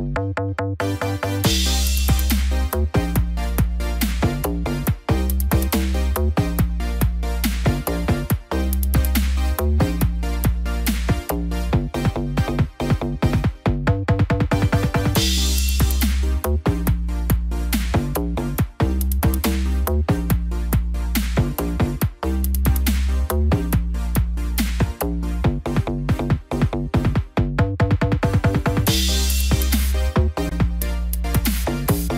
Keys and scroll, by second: 3.7 ctrl+z, 3.9 ctrl+-, 4.4 ctrl+=, 4.9 ctrl+z, 7.4 ctrl+=, 10.9 ctrl+-, 11.3 ctrl+=, 12.2 ctrl+=, 13.8 ctrl+z, 21.7 ctrl+z, 29.6 ctrl+-, 30.6 ctrl+0.